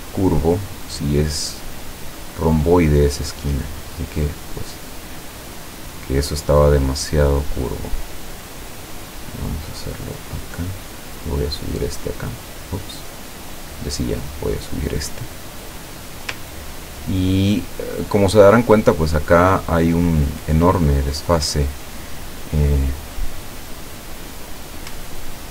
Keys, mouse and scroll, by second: 0.4 click, 2.0-3.6 drag, 4.2-7.2 drag, 7.9-10.6 drag, 11.7 click, 13.4 click, 14.5-16.4 drag, 16.7-17.2 ctrl+scroll down 2, 17.9 ctrl+click, 19.3-19.6 ctrl+scroll down 2.